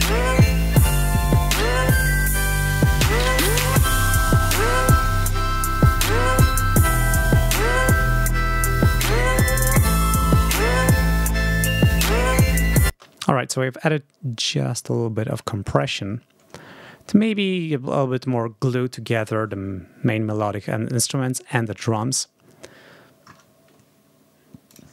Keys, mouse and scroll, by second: 1.0 click, 2.1 click, 2.5-3.1 scroll up 4, 4.6 click, 6.9 scroll up 2, 12.7 space, 24.5 click.